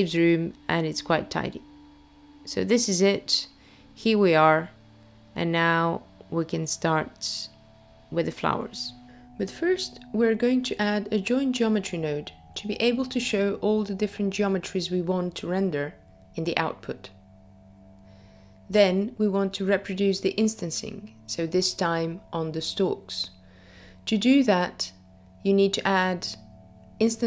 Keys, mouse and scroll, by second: 1.3 middle click, 3.5-4.1 scroll up 4, 5.3 click, 7.2 click, 7.9 click, 9.1 click, 10.5 shift+a, 11.0 click, 13.0 BackSpace, 19.7-20.1 scroll down 2, 20.7 middle click, 20.7-22.1 scroll down 1, 26.0 click.